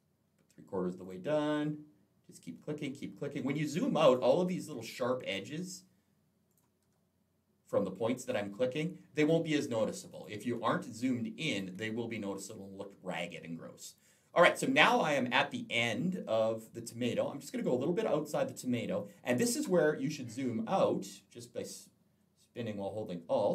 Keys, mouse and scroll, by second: 0.8 click, 3.9 click, 6.3 click, 10.0 click, 10.4 space, 10.6 click, 18.9 click, 20.3 scroll down 1, 20.8-21.4 scroll down 1, 21.4 scroll down 1, 21.7-22.0 scroll up 2, 22.8-23.3 alt+scroll down 1.